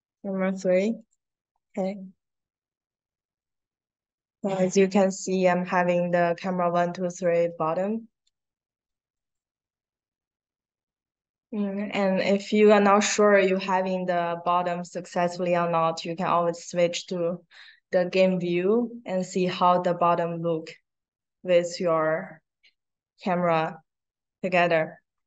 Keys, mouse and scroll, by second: 0.9 click, 4.7 middle click, 9.1 click, 12.2 click.